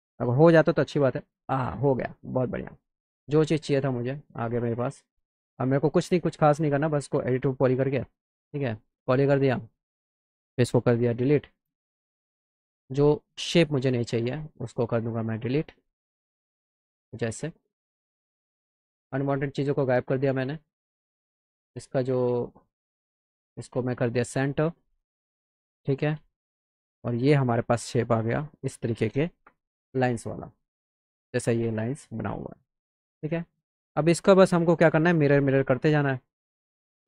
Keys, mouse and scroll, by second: 2.3-3.3 middle drag, 4.2 click, 9.1 click, 12.4 click, 13.7-14.2 drag, 14.7 click, 18.0 click, 18.8 click, 19.6 click, 20.8 click, 21.5 click, 23.2 click, 24.5 click, 25.9 z, 26.7 click, 27.5 click, 28.1 click, 33.0 click, 34.3-35.9 shift+drag.